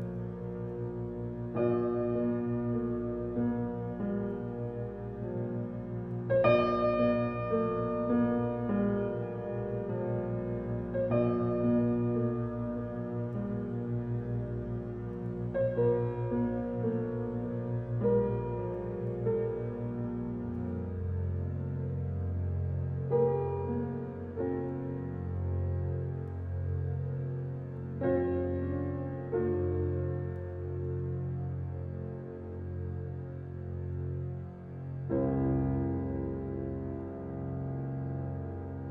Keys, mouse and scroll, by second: 1.6-6.4 drag, 17.5 Escape, 19.5 click, 19.6 click, 21.3 -, 23.6 click.